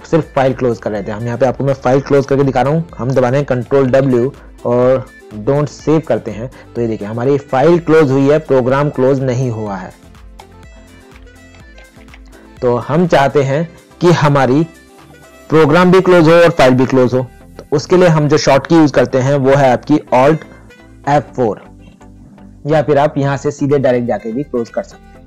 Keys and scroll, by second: 3.8 ctrl+w, 11.7 ctrl+n.